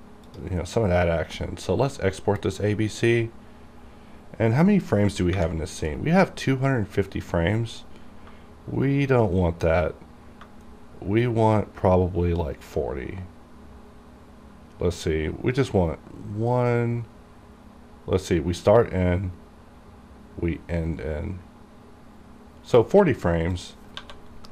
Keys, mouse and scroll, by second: 0.5 click, 8.4 shift+Num_Lock, 8.4 click, 10.8 shift+right click, 23.7 click, 24.1 1.